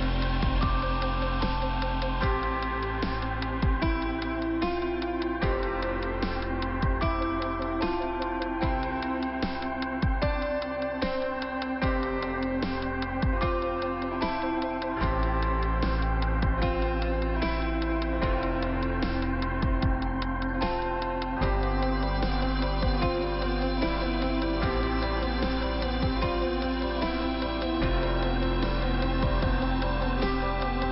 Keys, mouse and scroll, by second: 0.1 click, 1.0 click, 1.5 click, 2.6 click, 4.4 click, 5.7 click, 7.4 click, 7.9 click, 10.7 click, 12.2 click, 14.9 click, 15.0 click, 15.5 click, 17.1 click, 18.4 click, 20.7-21.3 scroll down 2, 22.0 click, 28.2 f, 28.6 click.